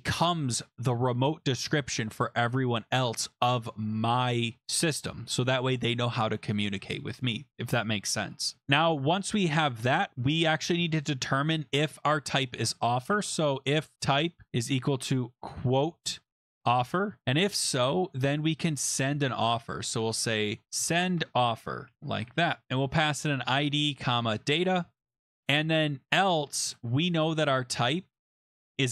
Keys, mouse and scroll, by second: 8.4 click, 8.6 click, 10.0 click, 10.6 Return, 10.8 Return, 12.8-18.9 typing, 20.6-28.9 typing.